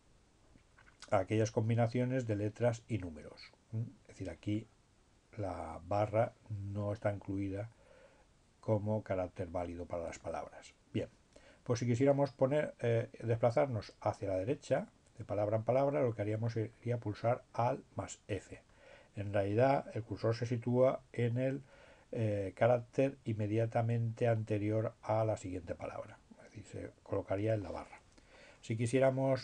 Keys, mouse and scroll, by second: 4.5-6.4 drag, 6.4-6.9 scroll up 1, 17.5 click, 25.6-26.6 drag.